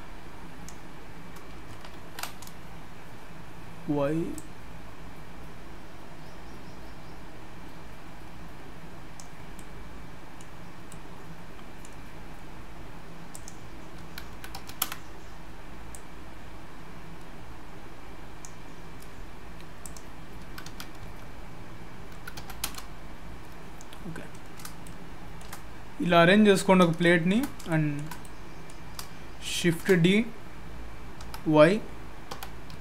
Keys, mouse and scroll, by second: 2.0 ctrl+z, 4.3 click, 9.5 middle click, 10.6 scroll up 2, 10.9 middle click, 13.3 click, 15.9 click, 19.8 click, 23.9 scroll down 2, 24.1-24.6 scroll up 3, 24.8 shift+middle click, 26.6-27.0 scroll down 2, 27.0 shift+middle click, 27.5 scroll down 1, 27.7 shift+middle click, 28.2 middle click, 29.5 shift+d.